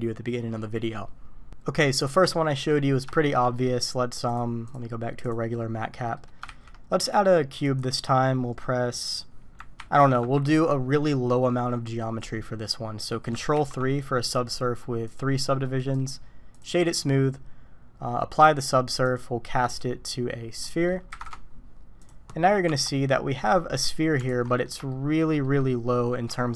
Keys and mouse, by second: 1.2 Delete, 2.5 middle click, 3.1 shift+middle drag, 3.5 middle click, 4.3-5.4 middle drag, 5.5-6.2 middle drag, 6.6 shift+a, 8.6 click, 8.7 middle click, 9.8 ctrl+3, 13.5 ctrl+3, 15.1 drag, 15.8-16.6 drag, 18.3 click, 19.1-19.8 drag, 20.7 click, 22.0 click, 22.7 Tab, 23.4-23.8 middle drag, 24.3 alt+a, 24.5 drag, 24.9-25.3 shift+drag, 25.4 click.